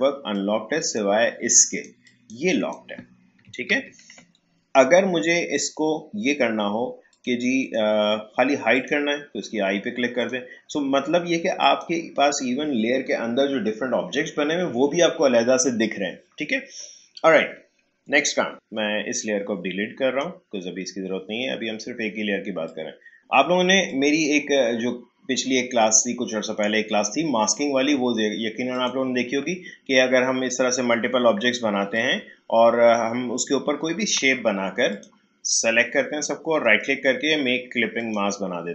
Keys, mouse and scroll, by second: 3.7 ctrl+z, 5.5 click, 18.5-22.6 drag, 22.6 click, 28.7 click, 31.6 click, 31.9-36.6 shift+drag, 36.6 right click, 38.0-38.7 drag.